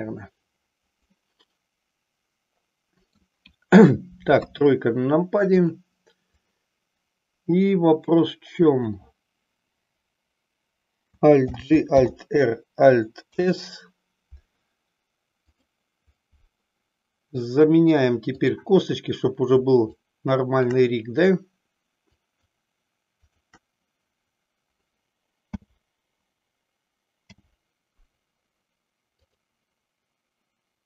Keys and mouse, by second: 1.2-3.2 middle drag, 4.3 KP_3, 5.5-6.0 drag, 6.5-8.8 drag, 11.5 alt+g, 12.1 alt+r, 13.4 ctrl+s, 15.5-16.0 drag, 20.0-20.7 shift+drag, 22.1 shift+click, 23.3 shift+click, 25.5 m, 27.2 n.